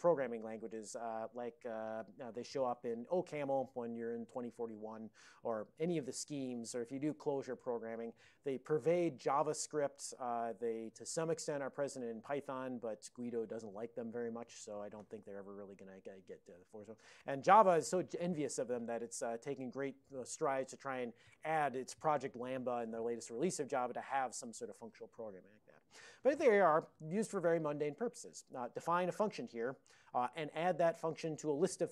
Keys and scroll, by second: 29.5 Down, 29.6 Down, 29.8 Down, 30.3 Up, 30.8 Up, 31.4 Up, 31.8 Right.